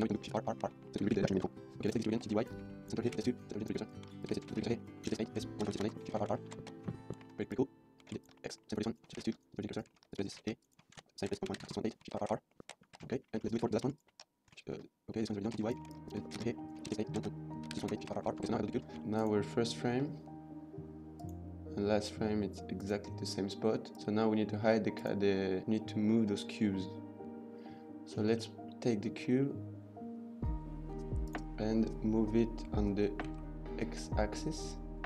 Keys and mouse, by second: 0.0-0.5 typing, 0.0 shift+middle click, 0.8 shift+middle click, 0.9-1.3 shift+middle drag, 1.5 middle click, 1.8 click, 2.1 shift+d, 2.2 y, 2.5 Tab, 2.6 shift+middle click, 3.1 shift+s, 3.2 Tab, 3.9 shift+middle click, 4.0 Tab, 4.2 click, 4.4-6.8 typing, 4.5 Tab, 4.7 shift+middle click, 5.9 KP_Enter, 6.5 ctrl+s, 6.9 shift+middle drag, 7.2 shift+middle drag, 8.0 shift+d, 8.2 x, 8.3 Tab, 8.3 middle click, 8.5 middle click, 8.9 click, 9.1 shift+s, 9.3 Tab, 9.9 shift+middle click, 10.3-12.7 typing, 10.5 Tab, 10.7 click, 11.7 KP_Enter, 12.9 ctrl+s, 13.4 shift+middle click, 13.7 shift+middle drag, 14.2 Tab, 14.8 Tab, 15.5-18.2 typing, 15.9 click, 15.9 Tab, 16.0 click, 16.4 Tab, 16.6 click, 17.9 KP_Enter, 18.4 ctrl+s, 18.5 middle drag, 18.9 shift+middle click, 20.9 click, 22.7 click, 23.7 click, 24.9 click, 28.3 middle click, 29.1 middle click, 33.2 g, 33.2 x.